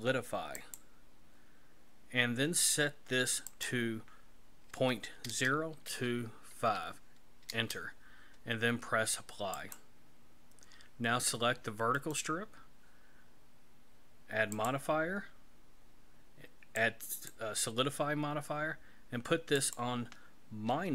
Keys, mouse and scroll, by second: 3.5 click, 9.6 click, 12.0 right click, 14.6 click, 19.6 click.